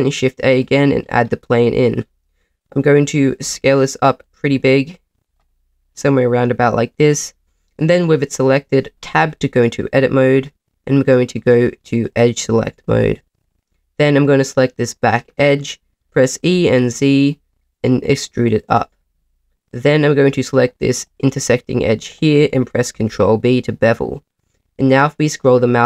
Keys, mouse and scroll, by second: 1.0-2.6 scroll down 1, 2.6-3.4 scroll down 1, 3.4 s, 4.2 click, 4.5 s, 5.2 click, 5.6 middle click, 7.3 middle click, 9.0 Tab, 12.0 click, 13.4 click, 15.1-16.4 scroll down 2, 16.4 scroll down 1, 16.4 e, 16.6 z, 18.4 click, 21.0 click, 22.9 ctrl+b, 24.8-25.8 scroll up 5.